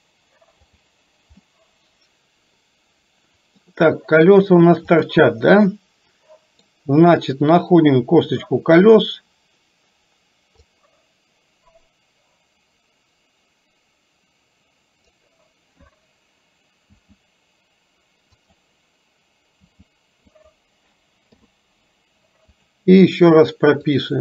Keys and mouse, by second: 0.6 click, 1.4-3.6 middle drag, 5.0 click, 5.8 middle click, 8.9 click, 10.8-15.3 drag, 17.0 r, 19.6 r, 21.3 i, 23.9 click.